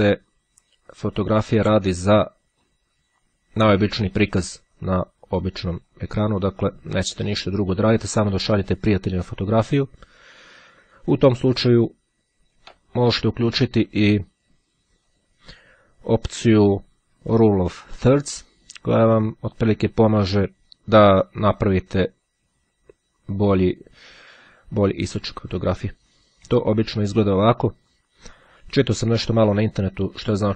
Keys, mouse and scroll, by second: 4.9-6.5 drag, 7.1-8.7 drag, 9.7-13.1 drag, 16.1 click, 17.6-18.9 drag, 20.7-24.9 drag, 25.7-28.2 drag.